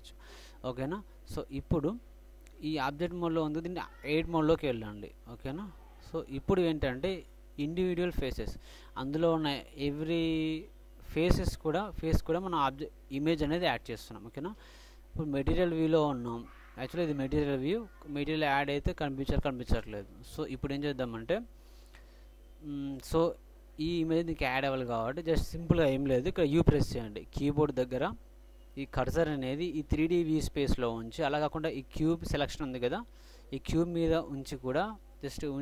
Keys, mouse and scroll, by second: 3.3-4.5 middle drag, 4.5-4.9 drag, 4.5 typing, 5.6 typing, 6.3 click, 8.9 ctrl+Tab, 15.9-17.6 drag.